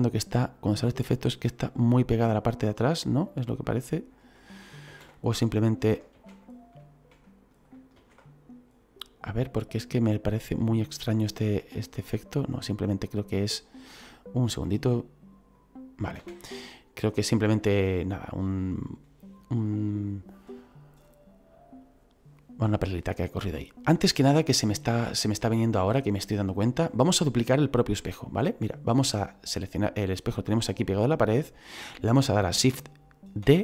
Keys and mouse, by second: 1.1 click, 4.8 ctrl+z, 6.2 ctrl+z, 7.9 ctrl+z, 10.9 click, 11.7 middle click, 13.0 shift+middle click, 14.6 click, 16.2 ctrl+z, 28.0 middle click, 29.3 click, 33.4 shift+d.